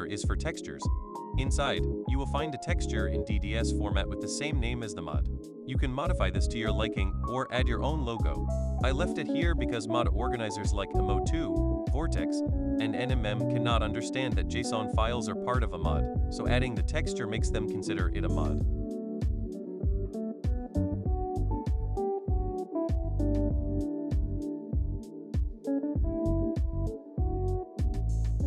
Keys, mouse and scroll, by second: 1.7 click, 1.9 click, 7.0 click, 7.1 click, 9.6 click, 11.2-12.3 drag, 13.4 click, 14.5 click, 14.7 click, 16.3 click, 16.5 click, 26.7 click.